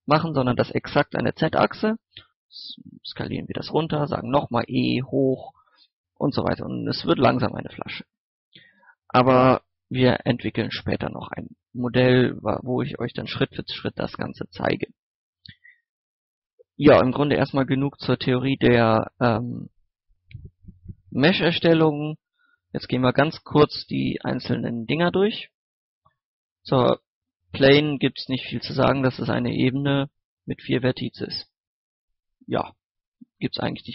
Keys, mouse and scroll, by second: 0.6 click, 2.2 s, 3.2 click, 3.8 right click, 4.8 click, 6.1 scroll down 1, 6.2 scroll up 1, 7.5-7.8 scroll up 1, 7.8 middle click, 8.5 Tab, 9.2 middle click, 12.9 x, 13.0 click, 14.2 shift+s, 14.6 click, 15.1 scroll up 1, 15.6-16.1 scroll down 1, 16.1 middle click, 16.4 shift+a, 17.4 shift+middle click, 18.0 scroll up 1, 22.3 shift+a, 25.0 click, 25.7 middle click, 26.0 scroll down 1, 26.3-26.8 scroll up 1, 27.4 Tab, 29.1 right click, 29.4 scroll down 1, 29.6 middle click, 29.7-30.1 scroll up 1, 30.1 scroll down 1, 30.6 right click, 32.6 Tab, 33.1 x, 33.4 click, 33.7 shift+a.